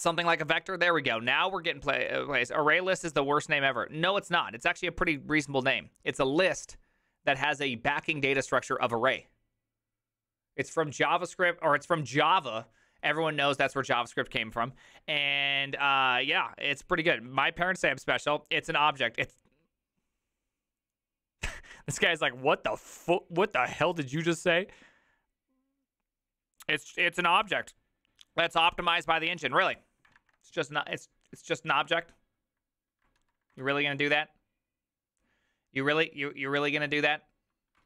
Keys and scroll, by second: 33.3 alt+f, 33.6 alt+h.